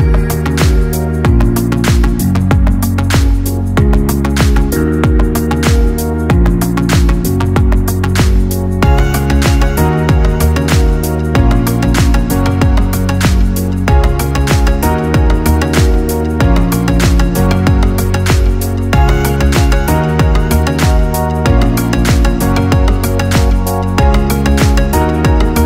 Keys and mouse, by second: 0.6 KP_3, 1.6 KP_1, 2.6-4.1 ctrl+middle drag, 4.1 KP_3, 5.1 KP_7, 6.9 g, 10.4 g, 15.3-19.8 middle drag, 19.8 g.